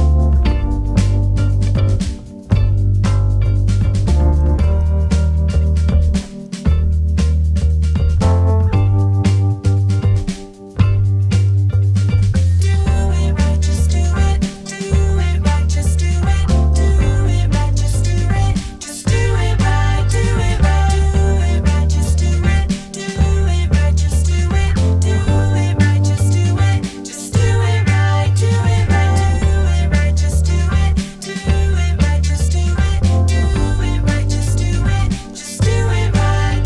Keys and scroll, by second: 2.0 0, 2.2 BackSpace, 2.6 shift+-, 4.8-5.8 typing, 17.8 Escape, 18.0 d, 21.7 Escape, 22.5 Escape, 25.5 Escape, 26.4 Escape, 26.6 d, 27.1 Return, 27.4 Return, 27.8 3, 29.0 Return, 31.0 0, 31.1 Return, 33.1 -, 34.8 -, 35.1 Return.